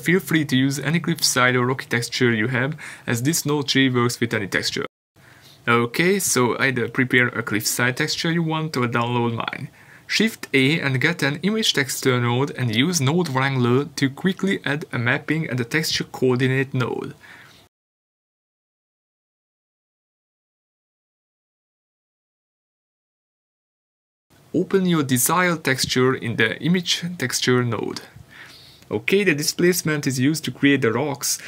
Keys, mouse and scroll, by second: 25.0 ctrl+t.